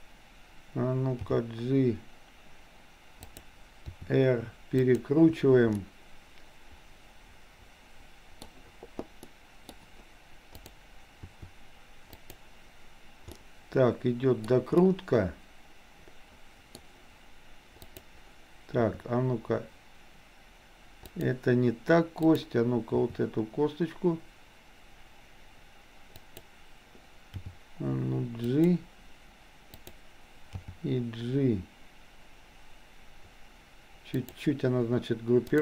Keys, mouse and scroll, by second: 1.4 g, 3.9 r, 5.9-8.5 middle drag, 9.4 middle click, 10.6 click, 11.2 r, 13.4-14.5 middle drag, 14.9-16.7 middle drag, 17.9 click, 18.9 r, 22.2 click, 23.0 r, 27.4 g, 29.7 click, 30.7 g.